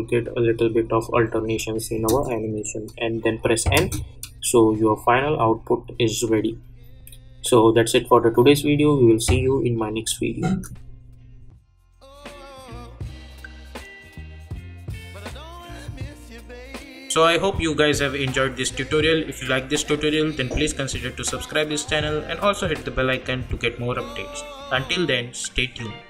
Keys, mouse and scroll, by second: 1.9 space, 10.4 space.